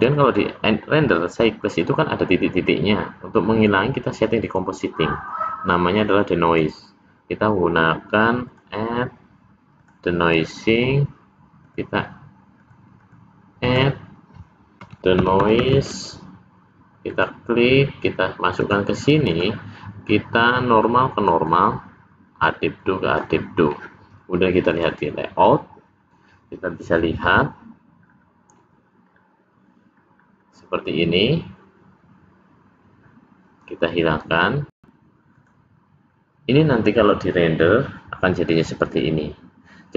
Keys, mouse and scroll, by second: 25.0 click, 28.3-29.0 scroll up 2, 29.2-29.6 scroll up 3, 30.4-30.8 scroll down 1, 37.6 click.